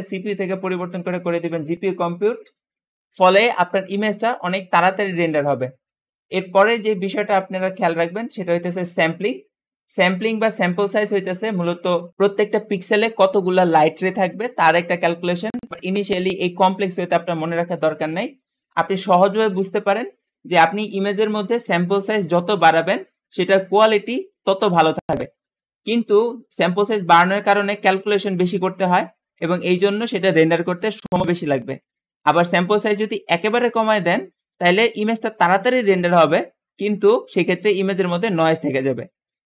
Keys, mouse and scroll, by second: 8.0-11.4 drag.